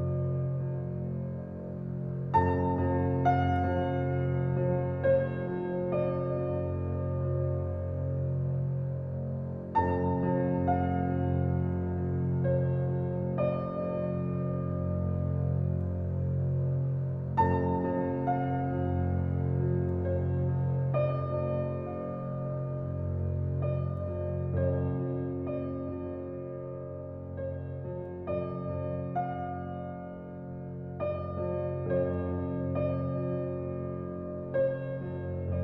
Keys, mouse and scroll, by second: 4.8-6.1 right drag, 6.1 click, 6.3-7.0 scroll down 5, 7.0 click, 8.7 click, 9.2 scroll down 1, 9.3-11.4 middle drag, 11.9-16.0 middle drag, 16.0 click, 16.8 scroll up 4, 17.5 Tab, 18.5 alt+click, 19.4 click, 20.2 alt+click, 22.3 alt+click, 22.8 alt+click, 23.6 alt+click, 24.4-26.0 middle drag, 26.0 Tab, 26.8 x, 27.8 shift+a, 31.4-35.6 middle drag.